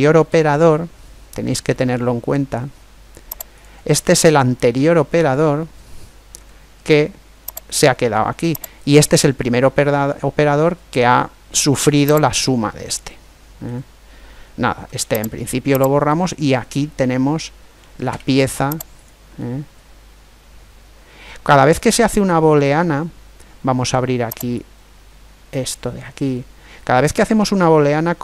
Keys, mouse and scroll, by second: 0.0 z, 1.0 middle click, 3.9-5.8 middle drag, 6.1 g, 8.5 right click, 9.2-11.2 middle drag, 10.3 right click, 12.1 right click, 12.5-14.2 middle drag, 14.5 Delete, 15.8 right click, 16.3 middle click, 16.5 right click, 17.0 click, 17.5 middle click, 17.8 Tab, 19.2-21.0 middle drag, 24.3 click, 28.0-28.2 middle drag.